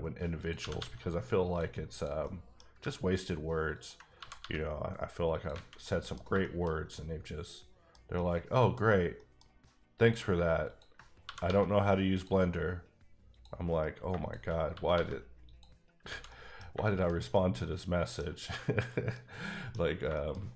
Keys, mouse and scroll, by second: 0.4 click, 0.6 g, 0.8 g, 1.4 click, 1.9 click, 2.2 middle click, 3.7 ctrl+click, 4.2 g, 4.4 g, 5.3 click, 5.5 a, 5.8 middle click, 7.3 middle click, 7.9 scroll down 1, 8.1 middle click, 8.8 scroll up 1, 9.2 middle click, 10.3 click, 11.2 g, 11.4 g, 12.1 click, 14.3 shift+click, 14.7 g, 14.9 g, 15.5 click, 15.8 scroll down 2, 16.1 alt+a, 16.3 middle click, 16.7 shift+middle click, 17.6 middle click, 18.2 middle click, 18.3 scroll down 1, 18.5 middle click, 19.4 middle click, 20.0-20.5 shift+scroll up 3, 20.1 shift+middle click, 20.4 middle click.